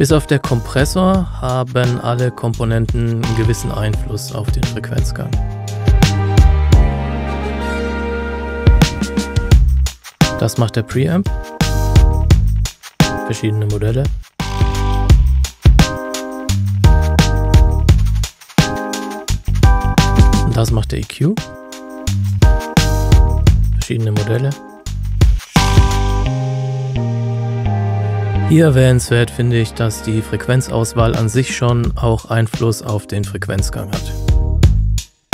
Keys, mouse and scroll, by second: 0.8 click, 11.2 click, 21.5 click, 32.3-34.9 scroll down 1, 34.9-35.3 scroll up 1.